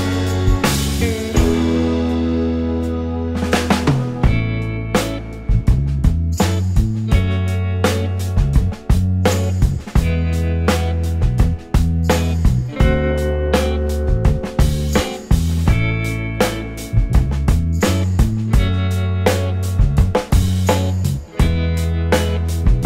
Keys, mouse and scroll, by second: 7.9-8.3 scroll down 1, 8.3 right click, 9.1-9.5 scroll down 2, 9.5 alt+scroll up 1, 9.5 alt+scroll down 1, 9.7 alt+click, 10.6 scroll down 1, 10.9 alt+click, 13.1 scroll, 13.2-13.8 scroll up 3, 13.4 alt+middle click, 15.2 alt+click, 17.8-18.7 scroll down 1, 18.7-20.9 scroll down 1, 20.9 right click.